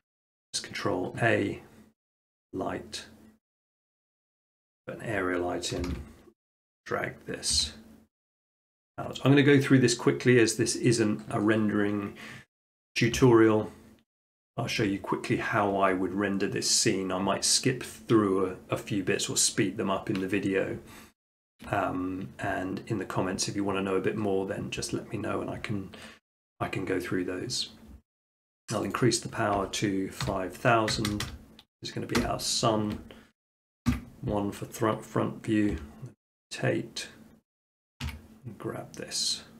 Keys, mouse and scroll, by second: 3.8 click, 4.7 middle click, 5.7 middle click, 5.9 KP_5, 5.9 KP_7, 7.6 g, 9.3-10.5 drag, 13.2 s, 14.5-15.6 drag, 28.9-30.1 drag, 30.3-30.9 typing, 32.2 Return, 33.9 1, 35.7 r, 37.6-38.7 drag, 38.0 g.